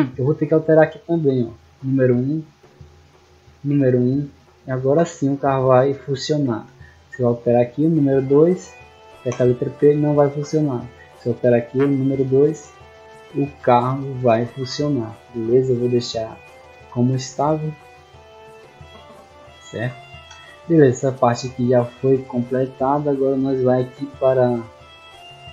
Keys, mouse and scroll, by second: 1.0 click, 1.1 click, 2.3 click, 2.5 click, 2.9 click, 3.1 click, 4.1 click, 5.1-6.3 typing, 7.2 right click, 8.0 click, 8.5 click, 9.7-10.7 typing, 11.9 click, 12.0 click, 12.9 click, 13.8-14.8 typing, 19.1-20.1 typing, 22.1 middle click, 22.1-22.7 scroll down 2, 22.9 middle click, 22.9 scroll down 2, 24.9 click.